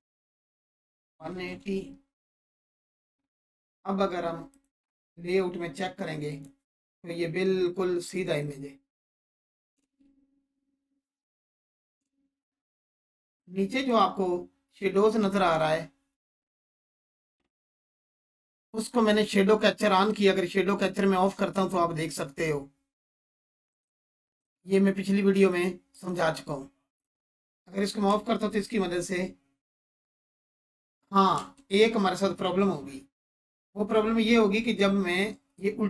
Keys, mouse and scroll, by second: 0.9-1.8 typing, 4.5 click, 9.8 space, 12.0 space, 13.2 click, 16.3 click, 17.7 scroll down 1, 19.4 click, 23.6 click, 28.1 space, 31.3 space, 35.5 scroll up 1.